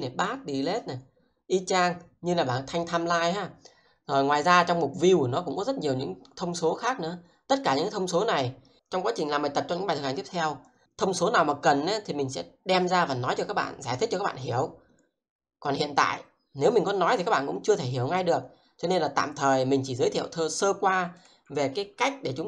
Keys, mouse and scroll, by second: 21.2 click.